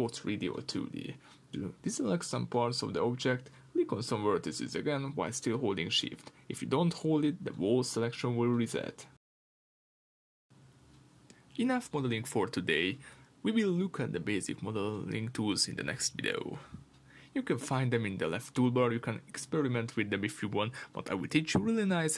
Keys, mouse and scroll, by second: 0.0 shift+click, 0.7-1.9 middle drag, 1.9 shift+click, 2.9 shift+click, 3.5 shift+click, 4.0 shift+click, 4.5 middle click, 5.0 shift+click, 5.4 shift+click, 5.8 shift+click, 6.2 shift+click, 6.5 shift+click, 6.9 shift+click, 7.3 middle click, 8.1 shift+click, 8.4 shift+click, 9.1-12.2 middle drag, 12.2 click, 12.8-22.1 middle drag.